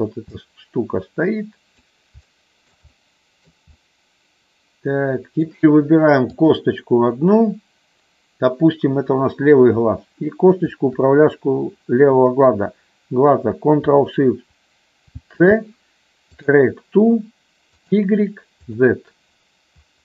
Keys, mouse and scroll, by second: 0.4-1.7 drag, 2.3 shift+middle click, 2.8 middle click, 3.7-5.3 middle drag, 6.3-7.5 drag, 10.6-11.7 shift+drag, 15.1 ctrl+shift+c, 17.7 click, 18.7 click.